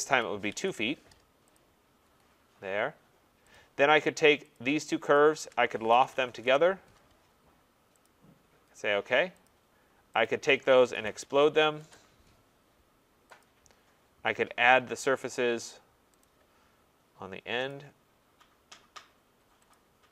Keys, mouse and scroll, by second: 0.0-2.6 typing, 1.6 click, 3.5 click, 4.5 click, 4.9-6.4 typing, 5.2 shift+click, 8.0 click, 9.5 click, 9.6-13.1 typing, 10.2 click, 13.4 click, 13.9 middle click, 14.3 middle click, 16.2 click, 17.7 click, 19.7 click.